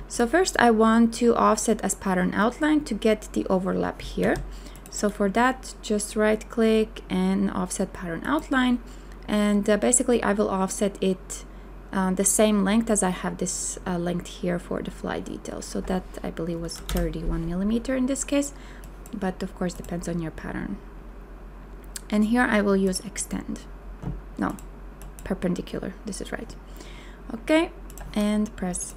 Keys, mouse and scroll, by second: 4.2 z, 16.6 KP_3, 16.9 KP_1.